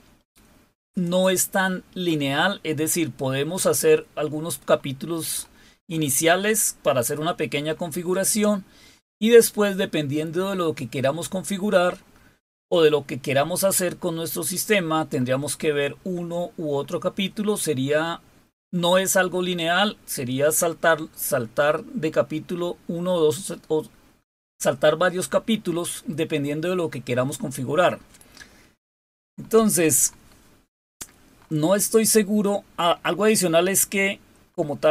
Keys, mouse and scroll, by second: 0.8 click, 3.0-4.4 scroll up 3, 4.4-11.7 scroll up 6, 14.9-15.8 scroll up 2, 16.4-17.3 scroll up 2, 18.4-19.4 scroll up 3, 25.3 scroll up 2, 26.8-32.6 scroll up 7, 32.6-34.9 scroll up 4.